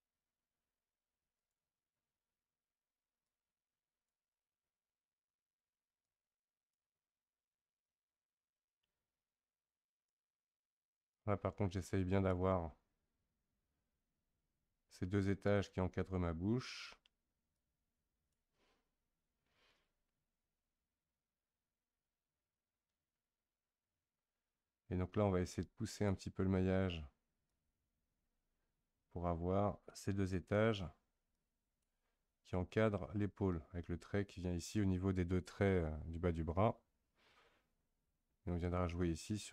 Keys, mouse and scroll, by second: 3.2-10.9 drag, 11.1-14.1 drag, 17.5-20.6 drag, 25.5-30.5 drag, 31.3-34.3 drag.